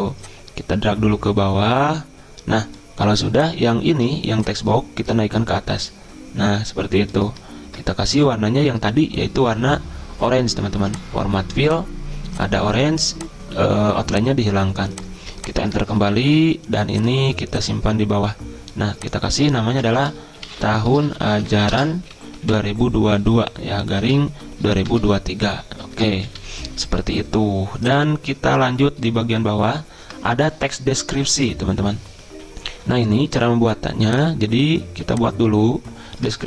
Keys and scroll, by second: 16.0 Return, 16.1 Return, 19.6 ctrl+a, 20.2-26.8 typing.